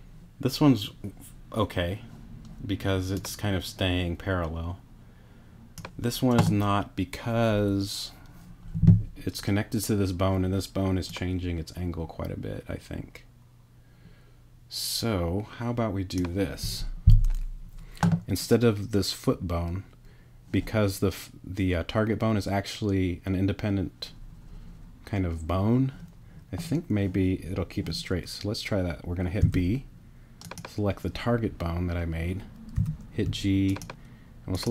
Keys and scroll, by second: 29.4 b, 32.8 g.